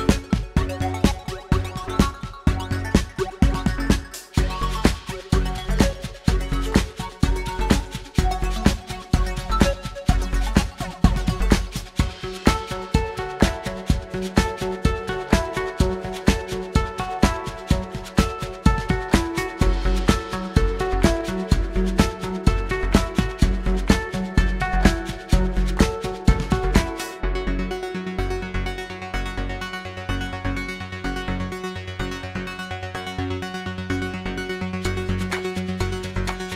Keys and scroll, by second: 1.6 q, 5.2 f, 8.7 F2, 13.9 F9, 15.9 1, 18.1 typing, 23.3 F9, 24.5 typing, 27.2 typing, 28.7 typing, 30.8 typing.